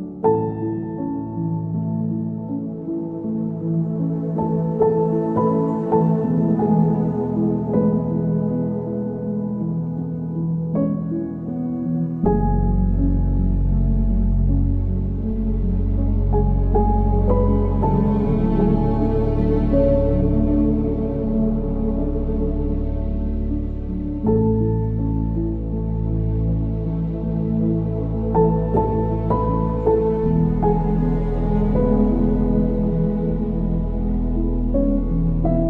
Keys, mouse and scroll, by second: 2.3-2.6 scroll down 1, 2.6-4.5 middle drag, 4.5 KP_3, 5.8-10.9 drag, 11.6 click, 12.9-14.8 drag, 14.8-16.4 middle drag, 16.4-19.4 drag, 19.9 click, 20.3-22.8 drag, 23.2-26.2 drag, 28.2 click, 28.9 click, 30.3-32.4 drag, 32.4 scroll down 1, 32.7-34.7 middle drag, 34.7-35.6 drag.